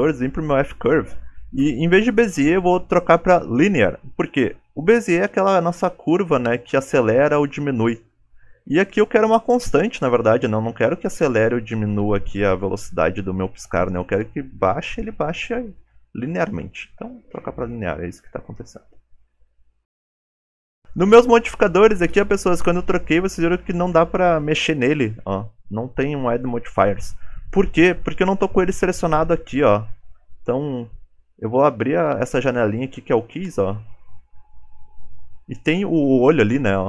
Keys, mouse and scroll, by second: 36.5 click.